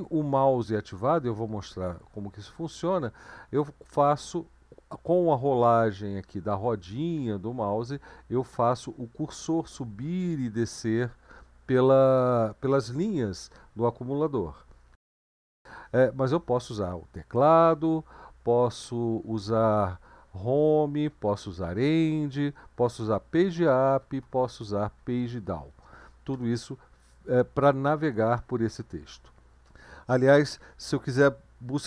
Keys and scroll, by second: 16.5-18.2 Up, 18.9 Left, 19.5 Left, 19.6 Left, 20.3 Home, 21.7 End, 23.1 Page_Up, 23.4 Page_Up, 23.6 Page_Up, 23.8 Page_Up, 24.0 Page_Up, 24.2 Page_Down, 24.4 Page_Down, 24.6 Page_Down, 24.8 Page_Down, 25.0 Page_Down.